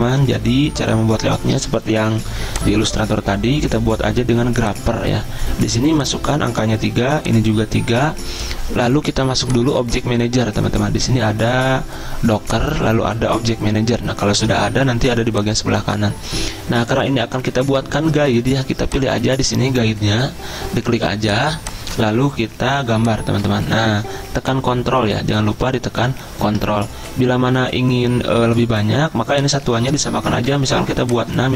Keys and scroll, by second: 28.2 ctrl+z, 30.4-31.2 typing.